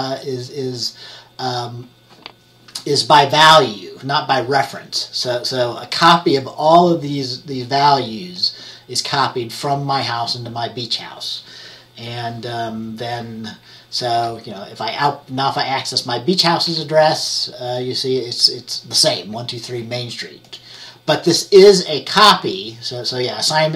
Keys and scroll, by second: 14.2 F10, 17.0 F10.